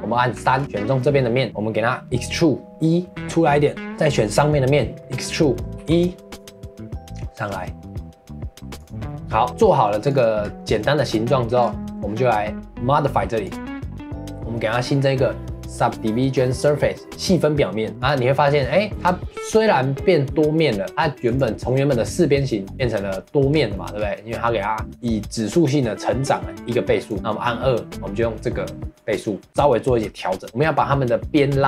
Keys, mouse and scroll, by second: 0.3 3, 0.5-0.9 scroll up 2, 0.9-3.1 middle drag, 3.1 e, 4.3 click, 4.7 scroll down 1, 5.0 middle click, 5.8 e, 9.0 middle click, 9.5 scroll up 4, 9.7-10.1 middle drag, 10.1 click, 10.4 scroll down 1, 10.6-10.9 middle drag, 10.9 scroll down 1, 11.1-11.6 middle drag, 11.6 scroll up 2, 11.8-13.4 middle drag, 13.4-16.6 drag, 17.9 middle click, 18.0 click, 18.3-18.9 middle drag, 18.9-19.5 scroll up 3, 19.5-21.2 middle drag, 21.2 click, 22.7 click, 23.5 scroll down 2, 23.7 middle drag, 23.9-26.5 scroll up 1, 27.0 click, 27.6-31.6 middle drag.